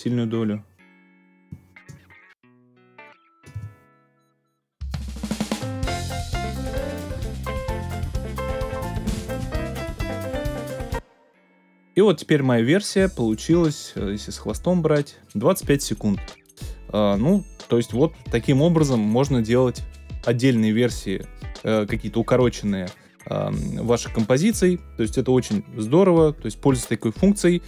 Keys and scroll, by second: 3.7 space, 10.6 space.